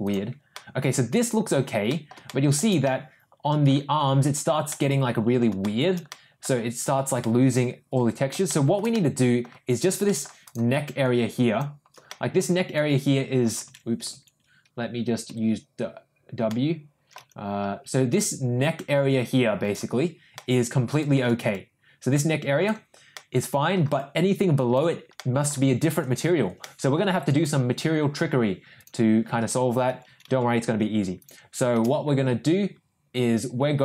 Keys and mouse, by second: 0.0 click, 0.5-1.5 middle drag, 1.8 middle click, 2.2 shift+middle click, 2.8 middle click, 4.6 middle click, 5.6 shift+middle click, 6.0 middle click, 7.1 middle click, 7.5 middle click, 8.4 shift+middle click, 8.8 middle click, 10.0 middle click, 10.4-11.6 drag, 12.0 middle click, 12.7 click, 15.2 ctrl+w, 16.4 middle click, 17.6 ctrl+w, 18.2-19.7 drag, 20.3 middle click, 21.4-22.6 drag, 23.1 middle click, 23.9 click, 25.1 middle click, 26.5 ctrl+middle click, 28.7 ctrl+click, 31.1 ctrl+click.